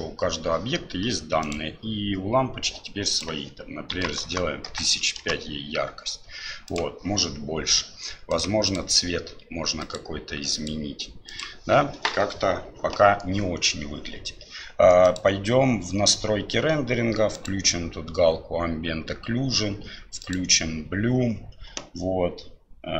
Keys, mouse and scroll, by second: 3.1-6.2 drag, 4.2 KP_0, 6.8-8.4 drag, 8.7 click, 15.0 click, 17.4 click, 20.2 click.